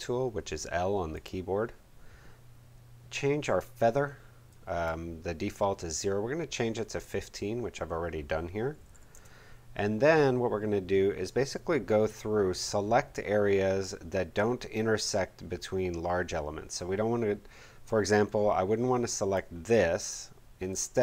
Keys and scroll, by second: 8.5-9.4 typing.